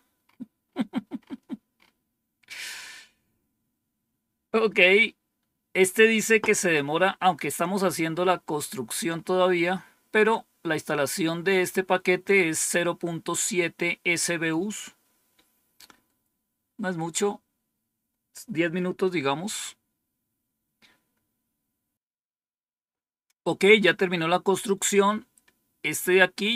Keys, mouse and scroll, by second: 2.7-3.4 scroll down 2, 3.4-4.0 scroll down 1, 4.0 scroll down 1, 24.4-25.7 scroll down 2, 26.0-26.5 scroll down 2.